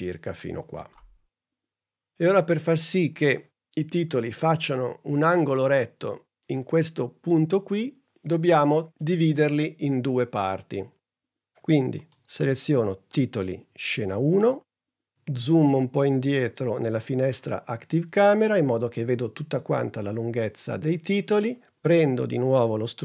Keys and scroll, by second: 3.0 super+Tab.